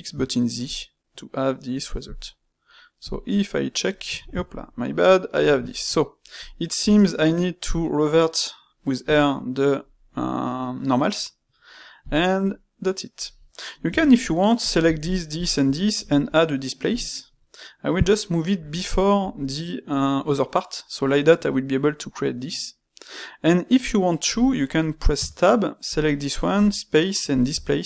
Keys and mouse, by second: 0.6-2.0 middle drag, 3.0 drag, 3.4-4.8 middle drag, 4.8 click, 5.1-6.3 ctrl+middle drag, 6.3 click, 6.8 space, 12.4-13.8 middle drag, 13.8 Tab, 14.6 click, 15.0 shift+click, 15.3 shift+click, 15.9 space, 25.8 click.